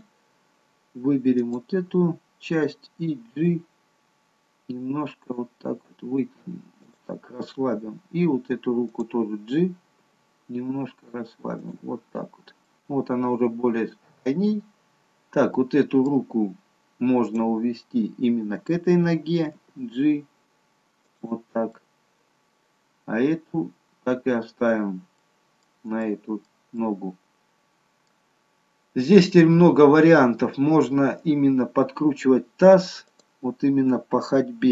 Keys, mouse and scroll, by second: 1.4 click, 3.4 g, 8.9 click, 10.3 g, 12.2-15.0 scroll down 3, 12.7 middle click, 15.0-15.5 scroll up 2, 15.5 middle click, 17.2 click, 19.5 g, 21.8 middle click, 25.2 middle click, 26.1 middle click, 28.4 middle click, 28.4-29.2 scroll up 3, 29.2 middle click, 29.2-29.8 scroll up 1, 30.8-31.5 scroll down 3, 33.1 click.